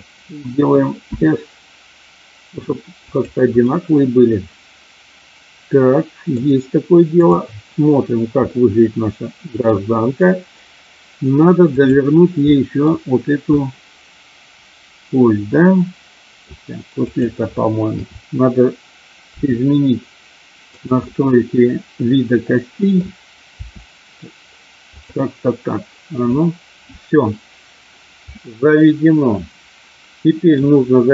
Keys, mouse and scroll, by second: 1.1 s, 3.0 click, 3.7-6.5 middle drag, 8.5-9.7 middle drag, 11.5 click, 12.4 middle click, 13.5-16.5 middle drag, 17.0 click, 17.8 KP_7, 19.3 r, 20.7 click, 20.9-22.9 middle drag, 23.6 r, 24.9 click, 28.3-30.6 middle drag.